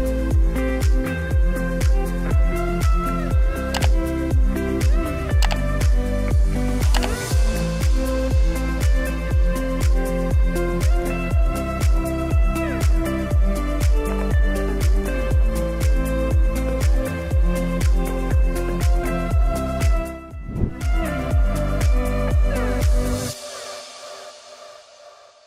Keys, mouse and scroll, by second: 0.5 click, 1.9 space, 8.0-9.0 drag, 9.9 space, 12.0 space, 18.9 space.